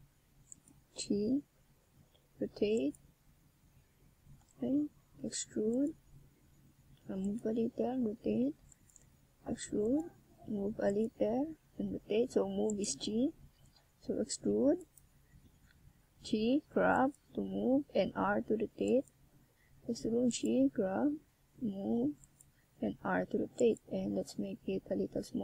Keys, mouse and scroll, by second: 0.0 s, 2.4 click, 3.5 click, 5.4 z, 7.9 e, 8.7 click, 9.0 s, 9.9 click, 11.8 e, 12.2 click, 12.5 s, 15.6 click, 19.0 click, 21.0 s, 23.4 click, 24.0 click, 24.7 click.